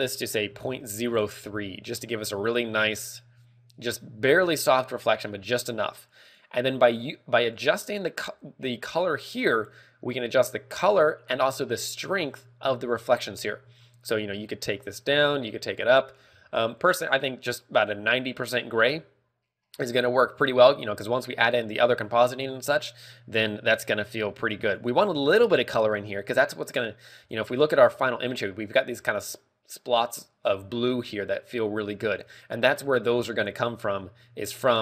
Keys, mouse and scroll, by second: 0.2 ctrl+click, 6.7 click, 24.9 ctrl+w.